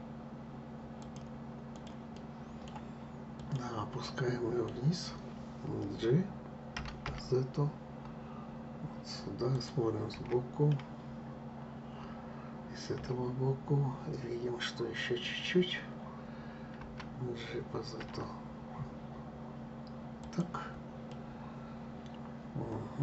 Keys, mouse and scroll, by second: 0.7 click, 1.4 click, 1.8-3.1 middle drag, 3.1 click, 3.7-6.5 middle drag, 6.5 g, 9.8 KP_1, 12.7 KP_3, 16.5 g, 20.8-23.0 middle drag.